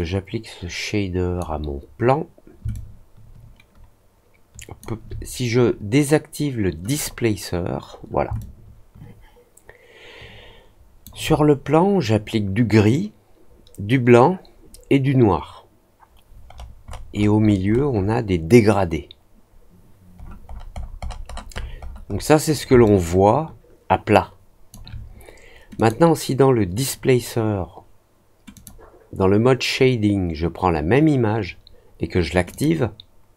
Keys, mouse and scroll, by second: 2.7-4.7 alt+drag, 6.8 click, 8.3-11.0 alt+drag, 16.4-18.1 scroll up 6, 20.1-21.1 scroll down 4, 21.2 middle click, 21.5 middle click, 21.7 middle click, 22.0 middle click, 22.8-24.6 alt+drag, 25.7 click, 28.5 click, 32.4 click.